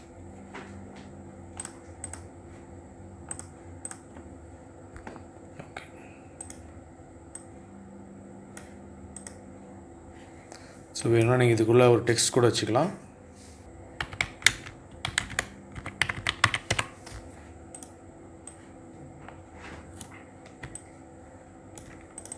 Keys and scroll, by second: 13.7-16.2 typing.